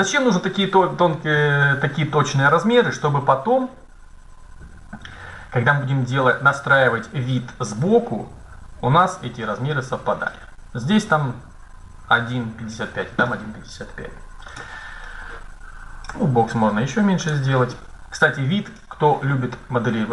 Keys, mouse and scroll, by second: 14.4-16.3 right drag, 15.9 s, 18.0 middle click.